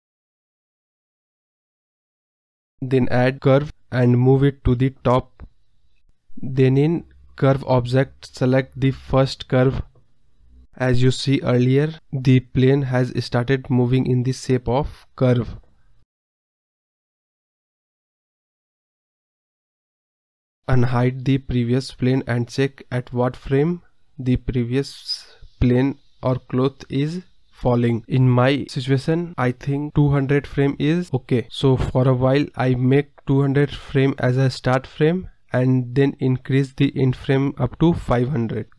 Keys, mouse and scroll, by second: 0.3 scroll down 6, 0.6 middle drag, 0.9 scroll down 1, 0.9 scroll up 2, 1.0 middle click, 1.5 click, 1.8 KP_0, 2.2-2.6 scroll down 2, 2.3 middle drag, 2.6 middle click, 3.5 drag, 3.7-4.6 scroll up 2, 5.3-6.4 drag, 7.8 click, 9.1 click, 10.2-11.2 drag, 11.2 scroll down 2, 11.4-12.4 middle drag, 14.6 scroll up 4, 14.8-15.3 scroll down 3, 15.6 click, 15.9 click, 16.6 ctrl+z, 16.9 click, 18.3 KP_0, 18.6 scroll up 3, 19.0 click, 20.9 click, 22.1-23.8 drag, 31.3 click, 32.1 KP_0, 32.8 click, 33.5 KP_0, 34.2-36.2 scroll down 15, 36.2-36.6 scroll up 1.